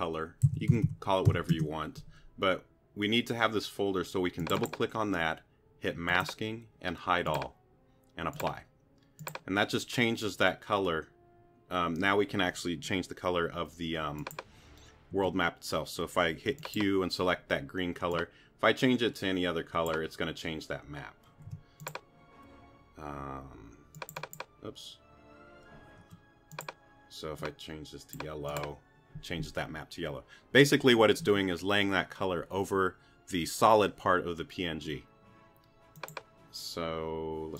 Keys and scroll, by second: 0.0-1.8 typing, 15.1 q, 21.5 t, 26.0 q.